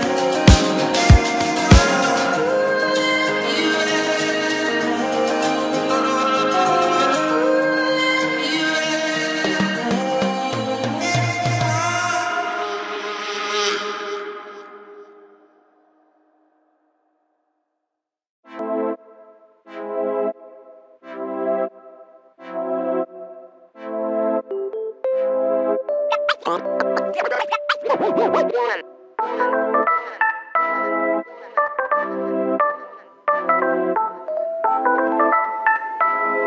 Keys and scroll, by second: 19.9 5, 24.9 shift+space, 26.7 shift+v, 32.3 shift+v, 33.7 shift+v, 34.7 space, 34.8 Escape.